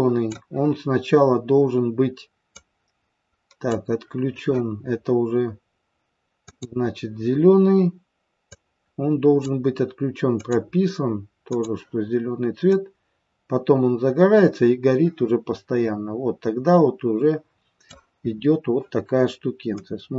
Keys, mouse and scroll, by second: 2.4 click, 6.5 click, 8.4 click, 10.4 click, 11.4 click, 12.7 click, 18.2 scroll up 3, 18.4 scroll down 1, 19.9 click.